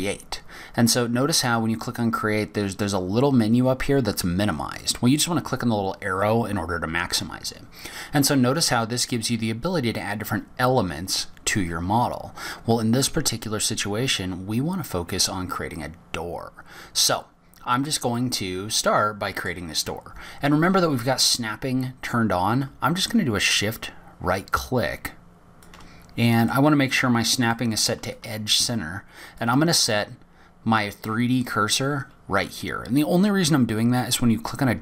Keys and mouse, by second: 5.5 click, 18.9 click, 19.3-20.3 middle drag, 27.2-29.3 drag, 29.6 shift+click.